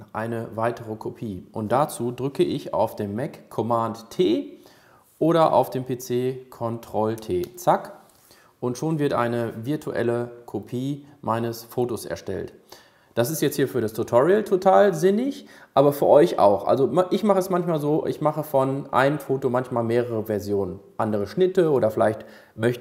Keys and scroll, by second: 7.5 super+t.